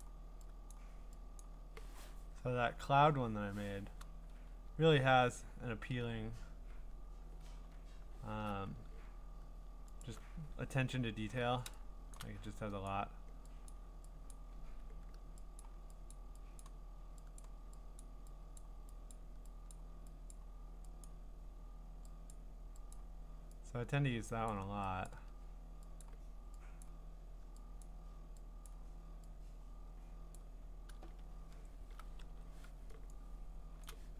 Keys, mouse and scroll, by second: 0.0 click, 0.7 click, 1.4 click, 2.4-3.2 scroll, 4.3-4.9 scroll, 5.3 scroll up 9, 8.0 scroll down 4, 10.0 alt+click, 10.0 scroll, 10.6-11.7 scroll, 12.1 click, 13.7 click, 14.3 click, 15.6 click, 16.1 click, 16.6 click, 17.4 click, 18.0 click, 18.6 click, 19.1 click, 19.7 click, 20.3 click, 21.1 click, 22.3 click, 22.9 click, 23.9 click, 24.5 click, 25.1 click, 26.0 click, 26.8 click, 27.8 click, 28.7 click, 30.3 click, 30.9-31.8 scroll, 32.3-33.8 v, 33.7 click, 33.8 click.